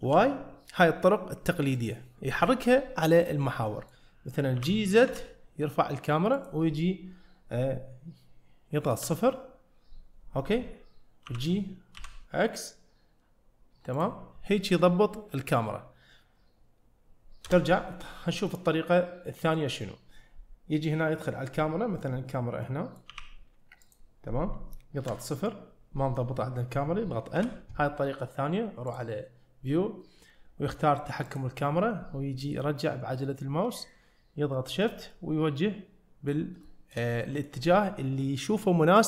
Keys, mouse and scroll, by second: 3.4 scroll down 1, 3.7 middle click, 4.6 g, 9.0 KP_0, 11.3 g, 17.5 KP_0, 18.6-19.6 middle drag, 22.7-23.1 middle drag, 23.1 g, 25.1 KP_0, 27.4 n, 28.9-31.1 drag, 31.3 click, 32.5-33.8 scroll down 2, 33.9-34.9 shift+middle drag, 35.1-36.4 middle drag, 37.2 middle click.